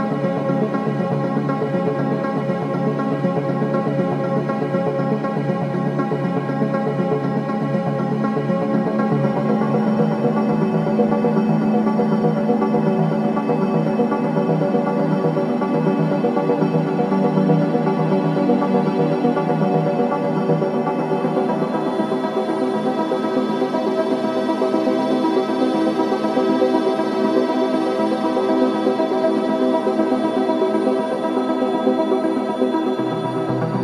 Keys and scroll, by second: 0.0 ctrl+alt+shift+], 2.7 t, 10.5-14.7 typing, 15.7 ctrl+KP_Subtract, 19.4 a, 21.9-24.6 typing, 26.4 space.